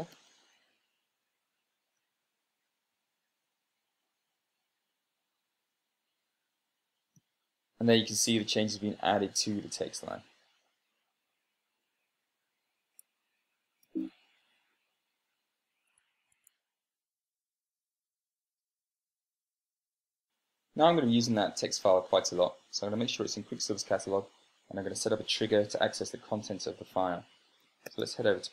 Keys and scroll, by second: 0.7 Return, 2.7 super+space, 3.5 Right, 14.5 super+[, 16.7 Escape, 16.8 Escape.